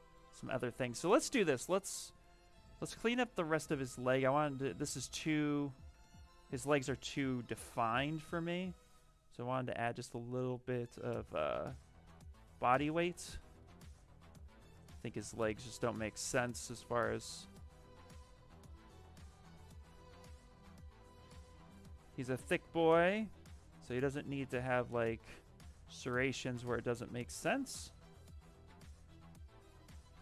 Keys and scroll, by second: 4.1 shift+f, 4.3 shift+f, 5.3 shift+f, 6.9 s, 7.8 b, 15.1 s.